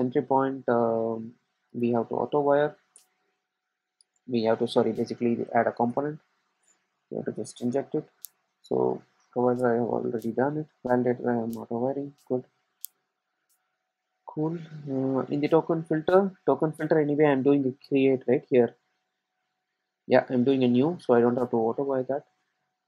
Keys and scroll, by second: 6.0 Return.